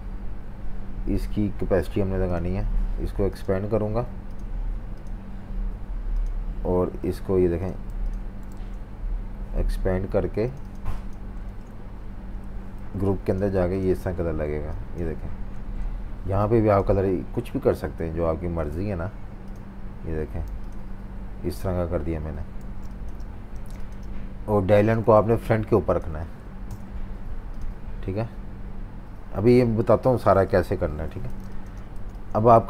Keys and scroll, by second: 7.0-8.5 typing, 8.5 super+z, 11.4 super+z, 12.8 i, 13.5 v, 15.6 super+z, 16.3 i, 20.4 v, 22.6-23.5 typing, 25.2 super+z, 30.5 super+-, 30.6 super+-, 31.4-32.6 typing.